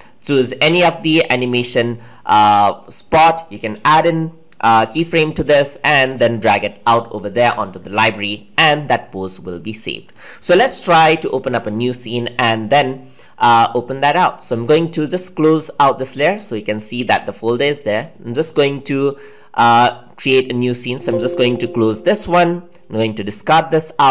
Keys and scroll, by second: 4.8 F6.